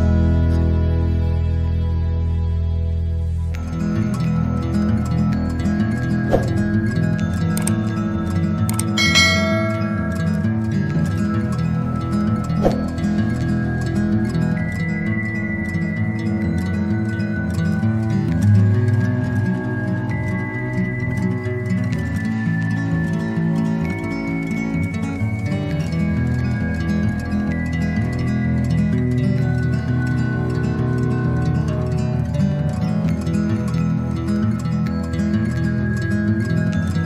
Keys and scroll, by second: 31.9 ctrl++, 32.3 ctrl++.